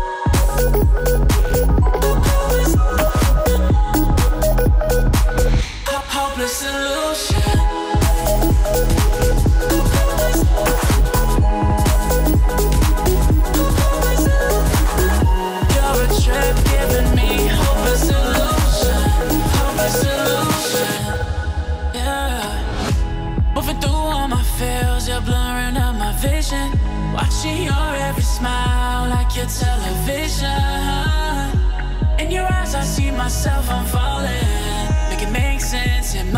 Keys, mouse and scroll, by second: 0.2-1.5 alt+scroll up 2, 2.5-2.9 alt+scroll down 2, 2.9-4.0 alt+scroll up 2, 4.0-8.8 drag, 10.4-10.9 alt+scroll down 2, 11.1-11.9 alt+drag, 14.0-15.1 drag, 15.9 alt+scroll down 1, 16.3 alt+scroll up 1, 16.8-17.5 click, 17.7 alt+scroll up 1, 18.2-20.2 drag, 20.4-20.8 alt+scroll down 1, 20.9 click, 22.3 Delete, 23.2 alt+scroll up 1, 23.9-24.3 drag, 24.0-24.8 typing, 26.6-27.4 typing, 26.9 click, 28.2 click, 29.3-30.8 shift+drag, 31.1-31.5 alt+scroll up 2, 31.5-31.8 alt+scroll down 2, 31.8-32.3 alt+scroll up 2, 32.5-33.3 click.